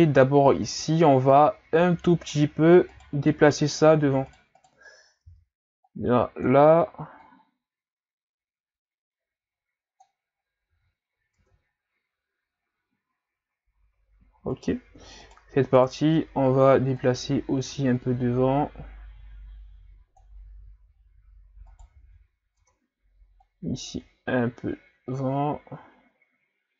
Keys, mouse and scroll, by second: 0.7 Tab, 1.1-1.9 scroll down 2, 1.9 z, 2.9 right click, 3.2 b, 4.6 right click, 5.3 b, 7.3-10.2 drag, 10.7 z, 11.4 Tab, 14.6 right click, 15.2 shift+right click, 15.8 shift+right click, 17.0-21.2 drag, 21.7 right click, 22.6 Tab, 23.4-26.7 drag.